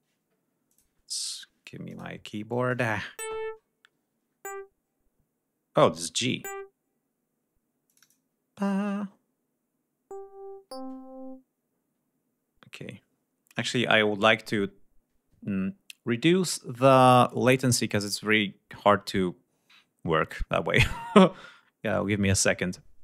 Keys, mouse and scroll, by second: 0.5 click, 1.0 click, 1.7 click, 2.5 click, 7.7 click.